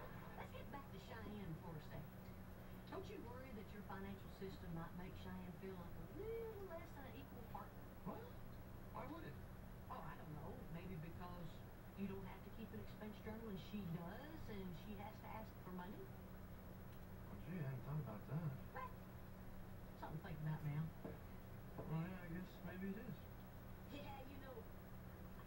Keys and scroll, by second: 8.6 shift+Right, 9.2 Right, 12.6 Return.